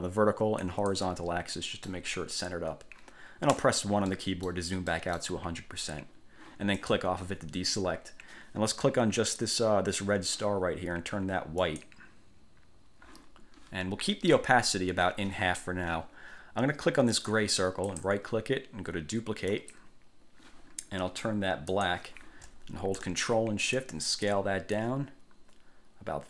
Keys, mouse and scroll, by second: 0.8 click, 1.7 middle click, 2.0 click, 3.7 1, 4.3 middle click, 5.1 middle click, 6.9 click, 9.3 click, 11.8 click, 17.3 click, 18.0 click, 19.7 click, 21.9 click, 23.9-26.2 ctrl+shift+drag.